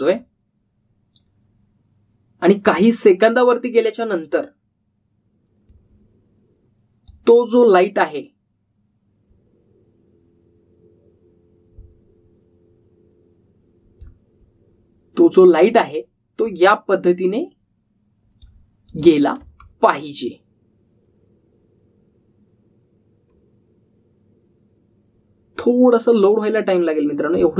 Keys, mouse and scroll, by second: 0.9 click, 3.7-6.8 drag, 17.4-19.6 click, 20.4 space.